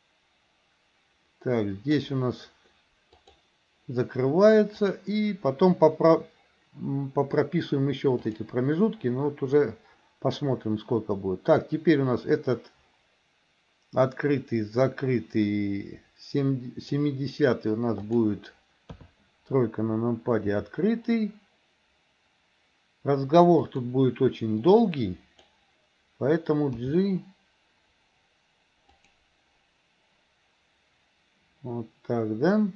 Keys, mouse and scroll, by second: 3.3 click, 4.9 click, 8.3 click, 9.7-17.1 drag, 18.1 click, 19.0 KP_3, 20.6 r, 24.8-25.7 drag, 26.8 g.